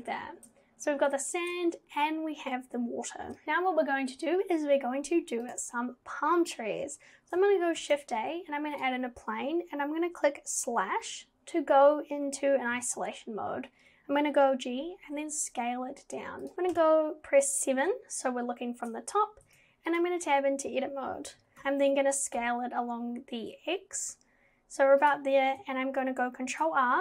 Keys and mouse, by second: 5.5 click, 7.8 shift+a, 11.1 /, 12.7 g, 16.8 KP_7, 19.5 Tab, 21.4 g, 26.5 ctrl+r.